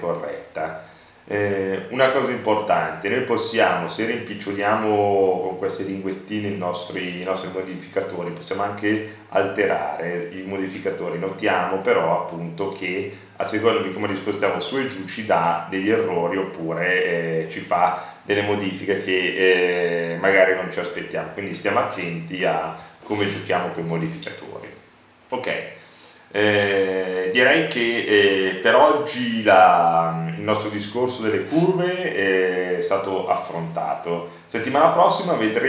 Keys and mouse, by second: 2.1 click, 2.7 middle click, 3.2 click, 3.3 middle click, 7.7-8.9 middle drag, 12.6-15.6 middle drag, 32.5-35.6 middle drag.